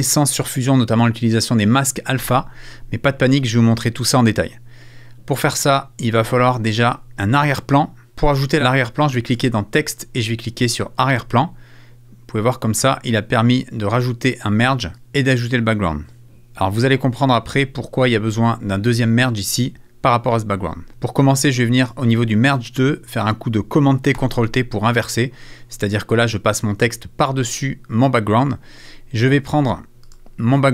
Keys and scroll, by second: 20.9 super+t, 24.1 super+t.